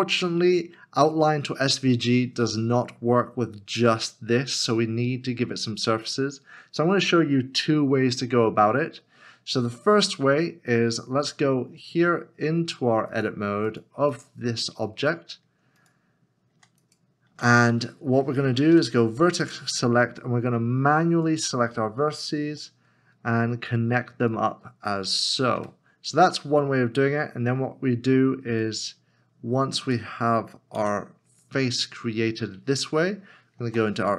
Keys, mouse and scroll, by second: 5.0 scroll up 1, 20.9 1, 21.0 shift+click, 22.5 f, 25.6 f, 30.8 f, 33.6 f.